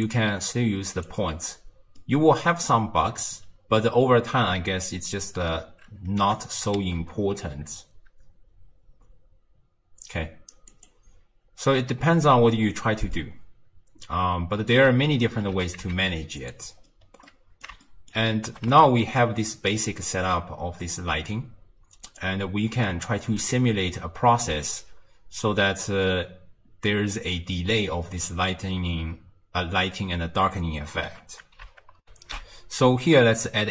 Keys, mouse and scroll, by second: 2.0-5.0 middle drag, 6.2 g, 13.1-15.5 middle drag, 15.5 g, 16.8-17.3 scroll down 2, 17.3-18.5 middle drag, 18.5 g, 22.9-25.9 middle drag, 32.1 ctrl+alt+shift+q.